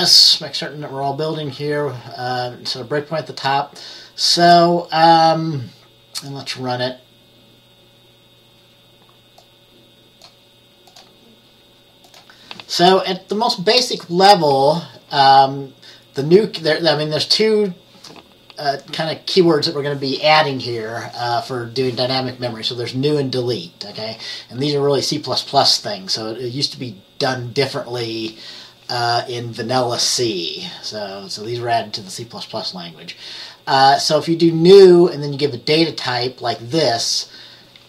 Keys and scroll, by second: 13.1 ctrl+b, 13.3 F10.